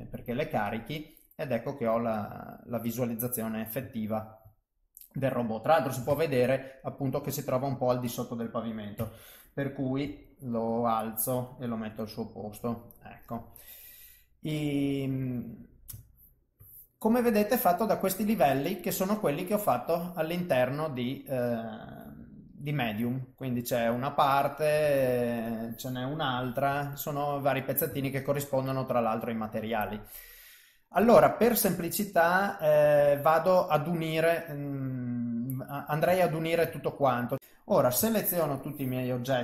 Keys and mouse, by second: 1.4 click, 2.7 middle click, 4.0 ctrl+middle click, 4.6 middle click, 6.1 KP_3, 9.0 a, 10.1 g, 11.9 KP_1, 15.4 middle click, 16.1 ctrl+middle click, 17.4 click, 17.9 click, 18.3 click, 18.8 click, 19.3 click, 19.6 click, 20.6 middle click, 22.8 g, 25.1 ctrl+z, 25.5 click, 26.4 g, 28.2 ctrl+z, 28.7 middle click, 31.3 middle click, 33.7 middle click, 34.9 middle click, 36.2 ctrl+middle click, 36.8 middle click, 38.0 shift+click, 38.3 shift+click, 38.6 shift+click.